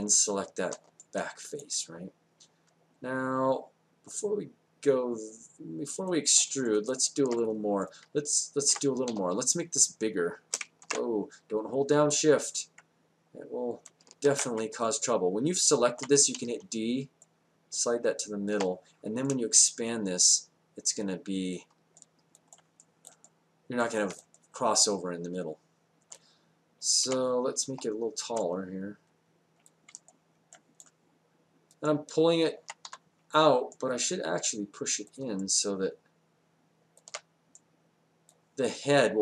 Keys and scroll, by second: 9.1 r, 10.8 ctrl+z, 14.3 ctrl+z, 16.3 d, 27.6 r, 32.9 w.